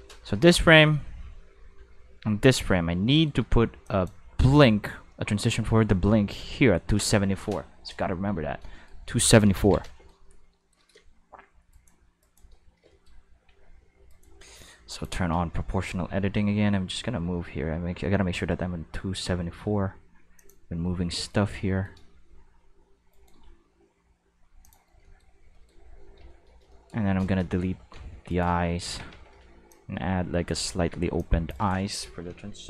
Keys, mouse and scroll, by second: 2.4 middle click, 2.7 middle drag, 3.0 middle click, 3.8 click, 4.8 middle click, 5.1 middle click, 8.3 a, 8.7 shift+middle click, 9.5 ctrl+s, 11.7 right click, 12.2 shift+right click, 12.5-14.1 shift+middle drag, 13.5 g, 14.1 right click, 14.9 click, 15.3 g, 16.6-20.4 middle drag, 20.4 click, 20.8-21.3 shift+middle drag, 21.7 shift+middle click, 23.1 right click, 23.4 g, 24.6 click, 25.5 shift+middle drag, 27.6 a, 28.1 g, 28.8 alt+a, 29.1 c, 29.7-30.5 drag, 30.6 click, 30.6-30.9 right drag, 30.9 c, 31.2 drag.